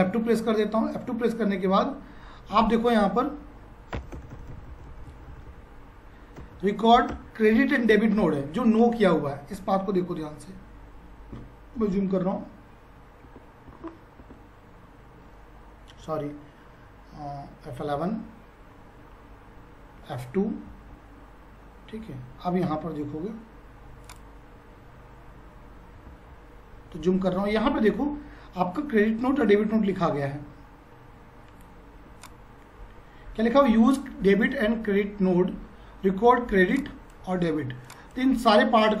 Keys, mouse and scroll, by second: 1.8 F4, 4.0 Return, 11.8 F3, 17.7 F11, 20.7 F2, 24.0 click, 29.3 F5, 32.2-36.4 shift+drag, 32.5 F5, 35.9 F5, 36.4 F5, 37.4 shift+F5.